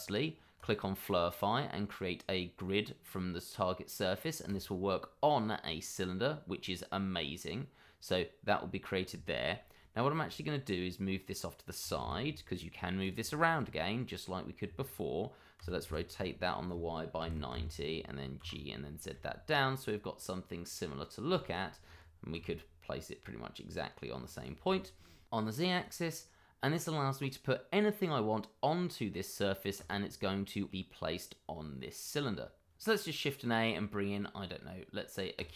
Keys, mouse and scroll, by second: 0.5 click, 4.4 click, 5.9 middle click, 11.8 g, 12.0 y, 13.0 click, 13.4 middle click, 15.5 r, 15.8 y, 17.1 typing, 17.5 Return, 18.4 g, 19.1 z, 19.8 click, 21.3 shift+middle click, 22.3 g, 24.3 click, 24.8 middle click, 25.0 shift+middle click, 25.7 click, 27.1 middle click, 29.8 click, 32.8 middle click, 33.2 shift+a.